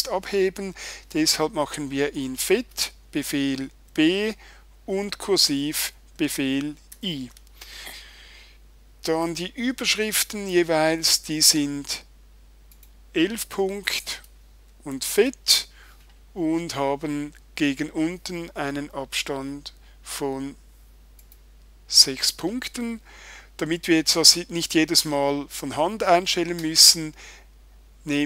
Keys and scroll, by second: 3.9 super+b, 6.9 super+i, 14.9 super+b.